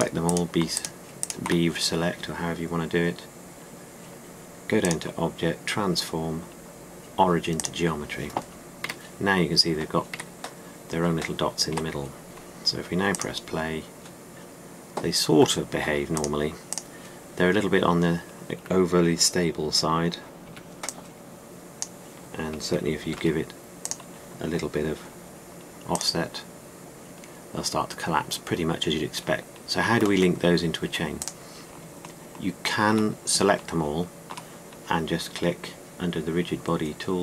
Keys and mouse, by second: 7.5-8.5 drag, 9.7 a, 11.0 a, 12.6 a, 17.6-21.4 drag, 21.4 b, 23.8 r, 29.4 ctrl+z.